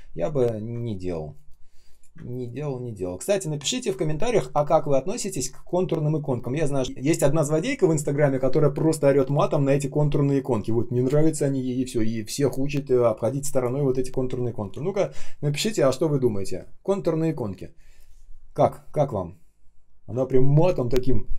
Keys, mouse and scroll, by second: 0.4 ctrl+scroll up 1, 1.3 shift+0, 2.0 space, 2.5 space, 2.6 space.